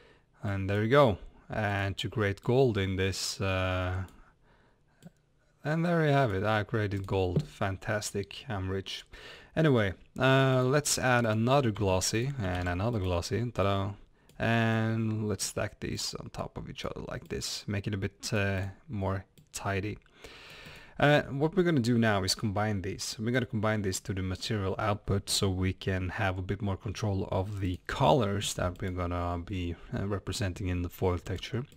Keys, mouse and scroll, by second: 5.1-7.0 drag, 11.7 shift+d, 14.7 click, 15.9-17.3 drag, 19.4-23.4 drag.